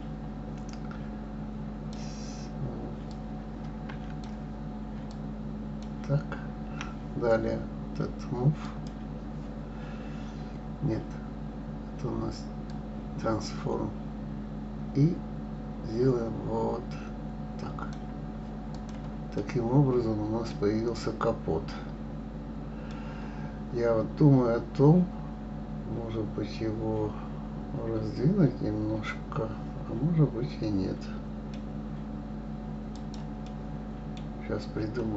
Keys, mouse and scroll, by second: 3.1 click, 5.1 shift+click, 8.6 click, 12.6-15.6 drag, 18.7 click, 19.4-20.6 middle drag, 20.6-22.9 scroll down 4, 22.9-25.9 middle drag, 32.9 click, 33.4-35.1 middle drag.